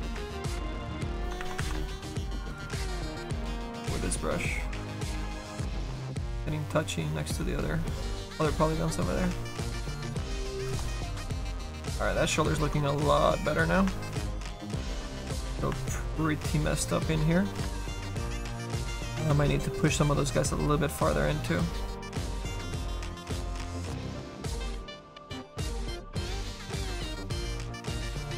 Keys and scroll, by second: 1.4 ctrl+z, 5.7 s, 10.5 ctrl+z, 18.4 s, 18.8 s, 22.4 z, 22.7 s.